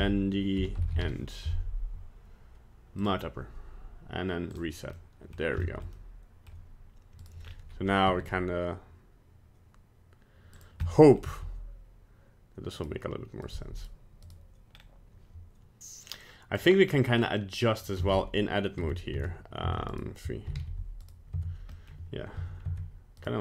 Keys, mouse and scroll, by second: 4.5 click, 4.9 middle click, 5.3 middle click, 5.6 shift+middle click, 6.0 middle click, 7.2 right click, 7.4 scroll down 3, 8.1 g, 10.9 middle click, 11.1 middle click, 11.3 g, 13.5 right click, 13.8 right click, 14.3 right click, 14.7-16.2 scroll up 1, 16.2-16.5 scroll up 1, 16.5 click, 18.1 Tab, 18.8 Tab, 19.2 Tab, 19.7 Tab, 19.9 right click, 20.5 alt+r, 20.6 alt+g, 21.1 right click, 21.4 Tab, 21.7 middle click, 22.4 Tab, 22.7 Tab, 23.2 right click.